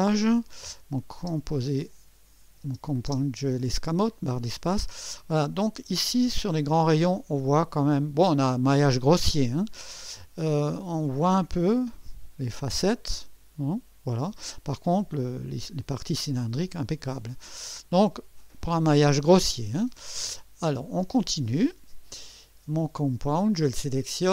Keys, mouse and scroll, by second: 1.2 space, 4.5 scroll up 2, 5.6-7.3 drag, 10.2-15.2 drag, 17.6-18.4 right drag, 21.2 click, 22.1 click, 22.1 space, 24.2 click.